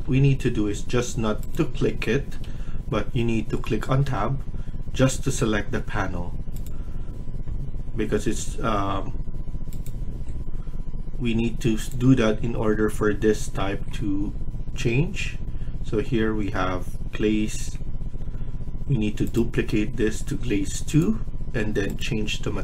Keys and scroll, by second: 0.0 Escape, 2.1 Escape, 2.3 Escape, 4.0 Tab.